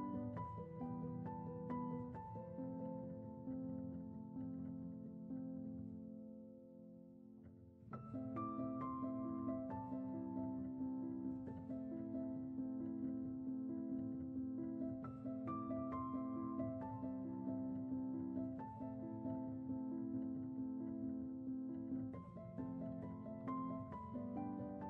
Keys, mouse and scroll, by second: 0.5 scroll up 4, 1.8 2, 2.0 middle click, 2.5 scroll down 1, 2.7 middle click, 3.5 scroll up 4, 3.7-5.0 shift+middle drag, 5.0-5.6 scroll up 7, 5.6 shift+middle click, 6.4-7.4 scroll down 16, 7.4 middle click, 7.9 scroll up 4, 8.5 middle click, 9.0 scroll up 1, 9.3-10.1 shift+middle drag, 10.1-11.2 scroll up 2, 11.5 click, 12.1 middle click, 12.8 scroll down 1, 13.1-14.1 shift+middle drag, 14.1 shift+click, 14.4-15.3 middle drag, 15.3 scroll down 4, 16.3 shift+click, 16.7-18.2 middle drag, 18.2 shift+click, 18.5-21.0 middle drag, 21.0 click, 21.6 shift+middle click, 22.1 scroll up 1, 23.1 ctrl+b.